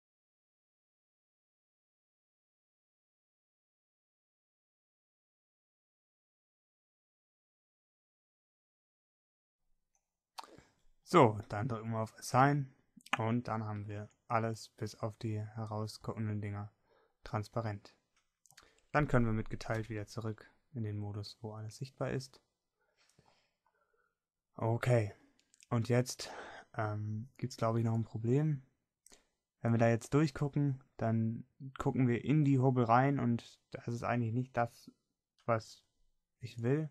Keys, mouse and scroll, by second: 1.0 middle click, 2.1-3.3 middle drag, 15.1 Tab, 20.9 KP_Divide, 24.5-33.8 middle drag.